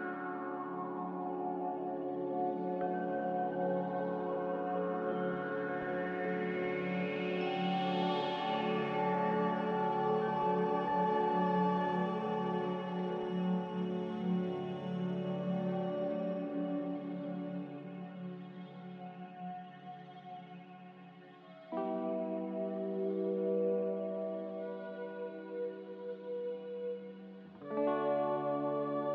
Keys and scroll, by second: 1.3 F9.